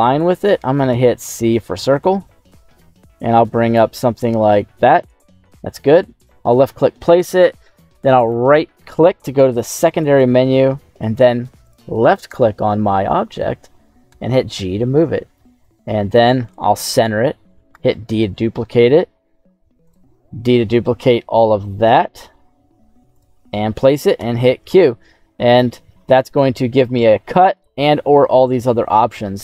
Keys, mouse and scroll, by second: 24.7 middle click, 25.4-25.9 scroll down 1, 26.0 shift+middle click, 27.5-29.4 drag.